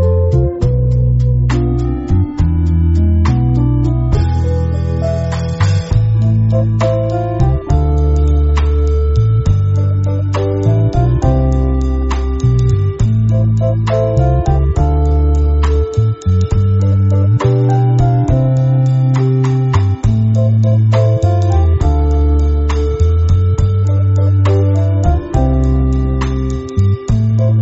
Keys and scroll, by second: 0.4 space, 1.0 alt+super+space, 1.2 alt+super+space, 4.2 space, 4.7-5.2 super+space, 9.9 m, 13.7 i, 14.5 v, 19.0 shift+super+[, 19.7 v, 23.1 i, 25.8-27.4 typing.